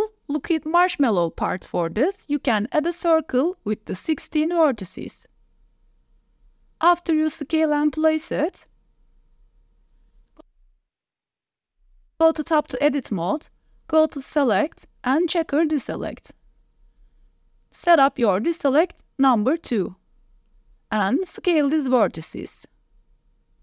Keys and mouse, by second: 0.2 click, 0.6 Tab, 0.8-1.2 drag, 1.3 shift+click, 1.4 click, 1.6 ctrl+s, 2.3 shift+a, 7.8-11.0 typing, 10.8 shift+middle click, 11.4 Tab, 13.0-13.8 drag, 15.5 shift+click, 16.4 click, 17.5 click, 21.0 s, 23.5 click.